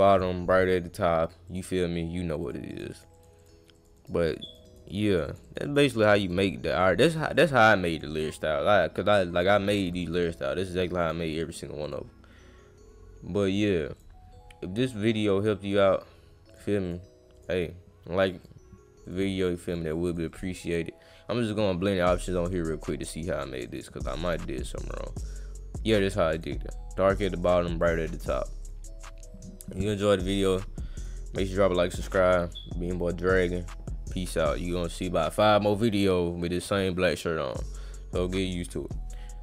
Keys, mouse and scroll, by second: 0.1 click, 1.5 click, 2.4 click, 2.7 click, 2.9 click, 3.2 click, 3.4 click, 3.7 click, 4.0 click, 4.2 click, 4.4 click, 4.7 click, 4.9 click, 5.0 click, 5.3 click, 5.4 click, 5.6 click, 5.8 click, 6.0 click, 6.3 click, 6.8 click, 7.3 click, 7.9 click, 9.9 click, 11.0 click, 11.8 click, 13.9 click, 14.8 click, 15.4 scroll down 2, 15.6 click, 16.5 click, 16.8 click, 17.3 click, 18.4 click, 19.0 click, 19.7 click, 20.1 click, 20.3 right click, 21.4 click, 23.7 click, 24.8 click, 26.4 click, 27.8 click, 28.6 click, 30.9 click.